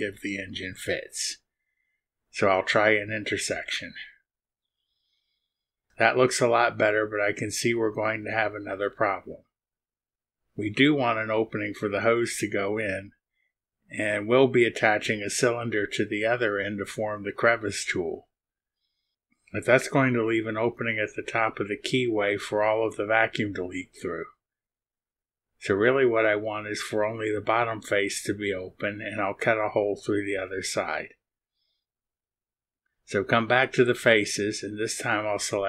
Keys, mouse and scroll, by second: 4.6 click, 6.5 click, 7.9 middle click, 8.2-9.3 drag, 9.5 middle click, 10.3-13.5 drag, 20.3 click, 20.8 click, 23.7 click, 25.0 click, 26.0-27.0 drag, 34.2 click, 34.8 click.